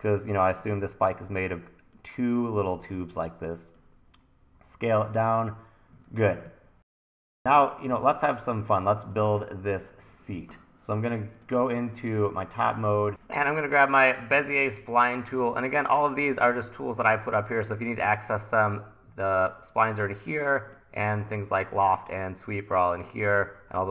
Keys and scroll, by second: 0.7 w, 1.3 e, 2.7-3.7 typing, 5.1 super+s, 6.4 1, 7.3 1, 8.6 1, 11.5 super+s.